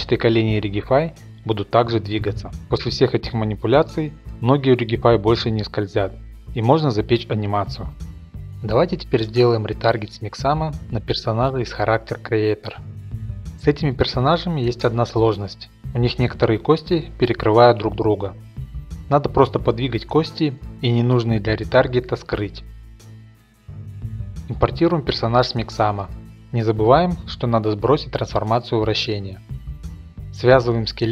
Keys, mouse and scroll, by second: 0.5-7.2 middle drag, 7.6 click, 8.3 click, 9.7 click, 10.3 click, 11.0 click, 11.6 click, 12.0 click, 12.6 click, 14.5 scroll, 15.7 ctrl+Tab, 16.1 click, 16.8-17.5 scroll, 17.0 shift+middle click, 18.8 right click, 19.3 h, 20.1 click, 20.8 right click, 21.2 click, 21.4 right click, 21.6 shift+middle click, 21.7 click, 21.8 right click, 21.9-23.7 typing, 22.0 click, 22.3 right click, 22.5 click, 22.9 right click, 23.1 shift+middle click, 23.3 click, 23.3 middle click, 23.4 right click, 23.5 right click, 23.8 click, 25.0 click, 25.2 click, 25.5 click, 25.9 click, 26.6 click, 26.8 shift+middle click, 27.3 click, 28.4 ctrl+a, 29.1 click, 29.7 click, 30.2 a, 30.8 click.